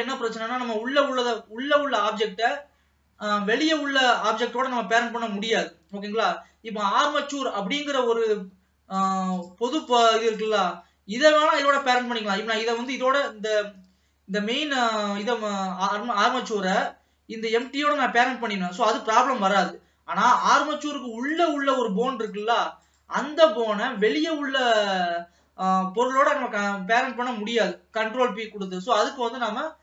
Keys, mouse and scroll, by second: 0.0-8.9 middle drag, 8.9-10.1 drag, 10.4 click, 11.7 click, 12.7 click, 14.7-17.6 scroll down 1, 17.6 click, 20.4 click, 21.5-23.7 drag, 23.8 scroll up 2, 23.9-26.5 middle drag, 26.5-29.5 scroll down 1.